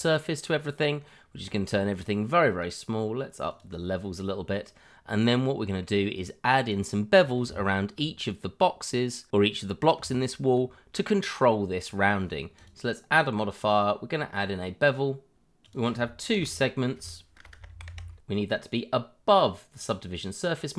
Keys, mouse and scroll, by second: 0.8-1.3 scroll up 1, 1.4 shift+middle click, 1.5 middle click, 1.6 shift+middle click, 1.7-2.6 scroll up 1, 3.5 click, 5.2 middle click, 7.4 Tab, 9.9 Tab, 13.5 click, 15.5 click, 15.7-16.1 scroll down 1, 16.4 click, 16.7 5, 17.4 BackSpace, 17.7 2, 17.8 Return, 18.7 click.